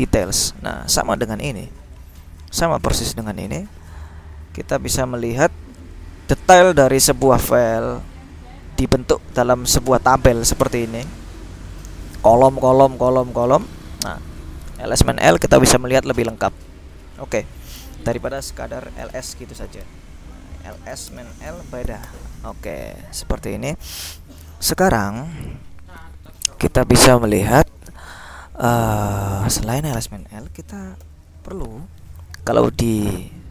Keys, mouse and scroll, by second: 0.0 click, 0.3-1.7 scroll up 2, 2.9-3.8 scroll down 2, 5.2 click, 7.5-9.2 drag, 9.7 click, 11.8 click, 16.6 click, 17.5 click, 18.5 ctrl+l, 19.2 s, 19.4 Return, 20.6-22.2 typing, 31.2 ctrl+l, 33.0 click.